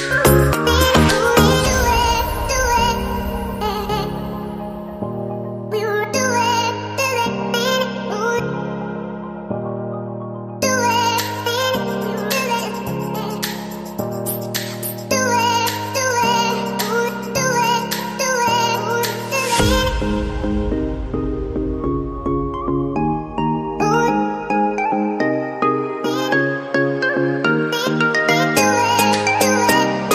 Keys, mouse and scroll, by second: 29.9 ctrl+Up.